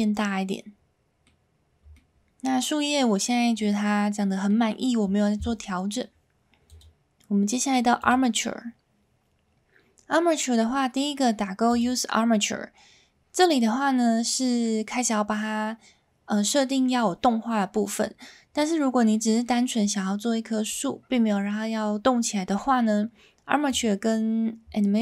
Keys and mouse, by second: 0.2-1.2 middle drag, 1.9 shift+middle drag, 3.6-4.5 middle drag, 6.7-8.1 drag, 19.1 middle click, 23.7-25.0 drag.